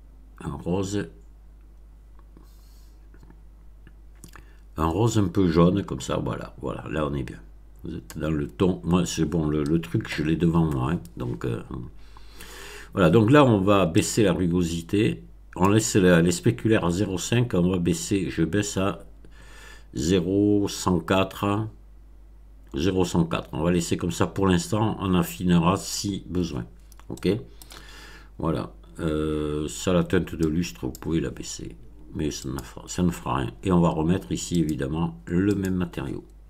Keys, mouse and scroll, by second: 12.0 scroll down 2, 13.9-15.8 drag, 27.1-27.7 middle drag, 30.4 click, 32.4 click, 34.5 click, 35.4 click.